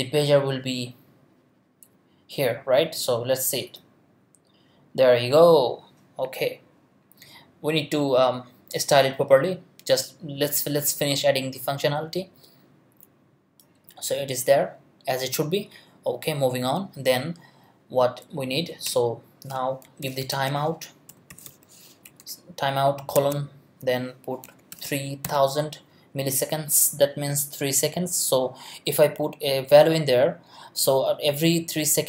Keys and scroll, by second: 18.9 Return, 19.6-22.7 typing, 23.1 shift+Tab, 24.4 3, 24.7 0.